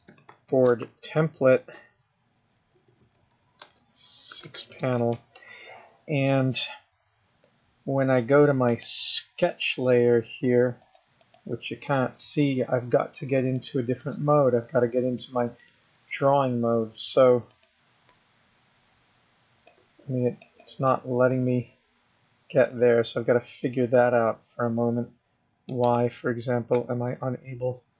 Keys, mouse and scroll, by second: 9.0 click, 11.2 click, 11.6 click, 13.9 click, 16.0 click, 17.9 click, 20.0 click, 21.0 click, 26.0 right click.